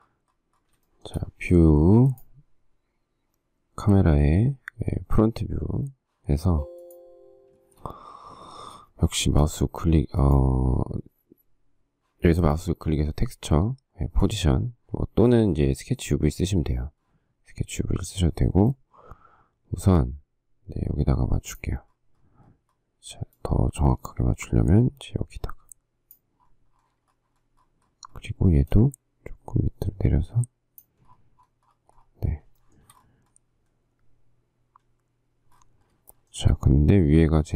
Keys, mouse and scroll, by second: 1.1 shift+middle click, 6.6 space, 8.7 space, 14.6 click, 32.8 shift+middle click, 36.3 shift+middle click.